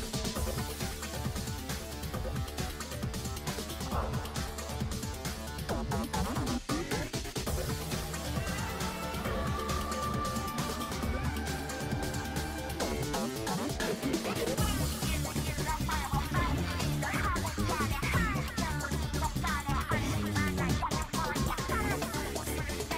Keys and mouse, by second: 1.4 shift+middle click, 1.7 shift+click, 3.0 click, 5.1 click, 7.0 click, 7.9 click, 8.7 click, 9.4 ctrl+z, 13.5 click, 20.0-21.6 drag, 22.8 shift+middle click.